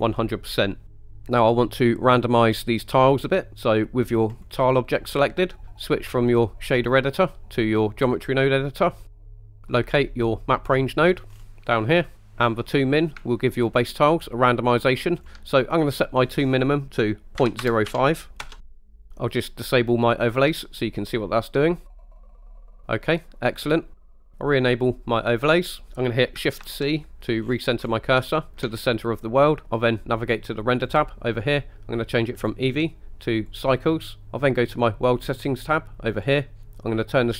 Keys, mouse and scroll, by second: 0.9 middle drag, 4.4 click, 6.8-8.4 drag, 9.5 scroll down 3, 9.7 middle click, 10.5 middle click, 11.3 scroll up 2, 11.8 middle click, 12.3 click, 13.2-15.1 shift+drag, 15.9-18.6 drag, 19.1 middle click, 19.1 KP_1, 20.5 click, 21.0-23.7 middle drag, 25.4 click, 26.7 shift+c, 27.5-28.0 scroll up 3, 27.6 middle click, 28.3 shift+middle drag, 28.8-29.6 middle drag, 30.9 click, 32.4-33.8 drag, 36.1 click.